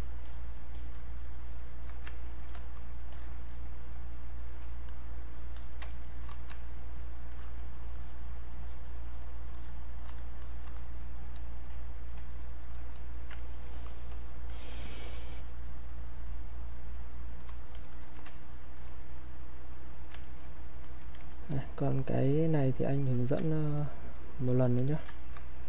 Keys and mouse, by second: 2.2 ctrl+right click, 2.5 click, 3.1 click, 4.1 alt+click, 5.6 alt+click, 5.8 ctrl+right click, 6.2 click, 7.4 alt+click, 9.0 alt+click, 12.1 click, 13.4 ctrl+right click, 13.7 ctrl+click, 17.1 click, 18.5 ctrl+right click, 19.3 click, 19.8 alt+click, 20.2 ctrl+right click, 20.8 alt+click, 23.1 alt+click, 23.4 ctrl+right click, 23.7 click, 25.1 ctrl+alt+right click.